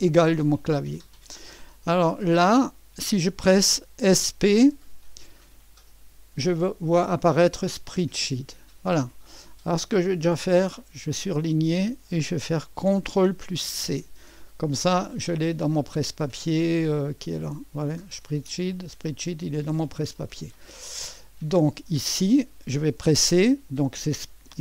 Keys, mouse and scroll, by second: 0.0 Menu, 4.1-4.6 typing, 8.0 click, 10.7 click, 13.9 ctrl+c, 17.4 click, 19.8-24.6 drag.